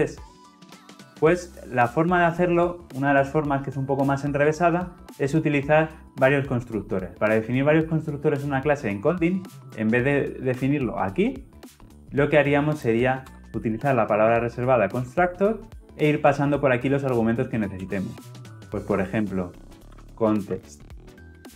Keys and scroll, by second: 15.2 Return.